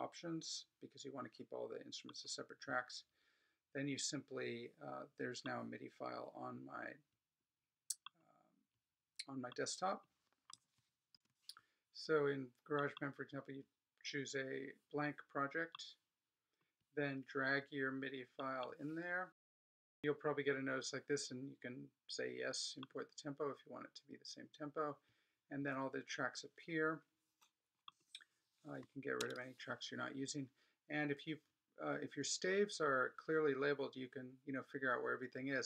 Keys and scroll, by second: 19.2 alt+p, 29.2 super+BackSpace.